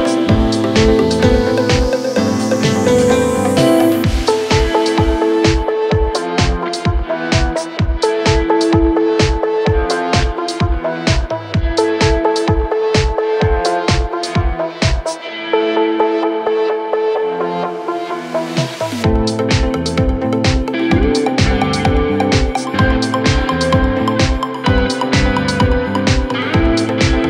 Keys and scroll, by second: 5.5 Down, 5.8 Right, 6.1 Down, 6.8 Right, 10.9 F3, 11.2 Escape, 13.2 shift+F2, 13.5 Escape, 14.2 shift+F2, 15.0 Escape, 17.3 ctrl+z, 19.7 ctrl+z, 20.1 Escape, 20.9 Delete, 23.4 Escape.